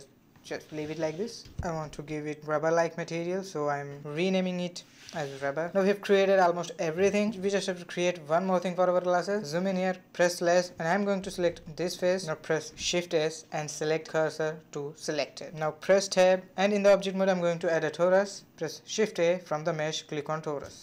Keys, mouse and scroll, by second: 1.3 b, 4.1-5.6 middle drag, 7.6 Tab, 8.0-9.6 scroll up 5, 10.1 /, 11.5 3, 11.9 click, 13.1 shift+s, 16.8 Tab, 18.1 shift+a.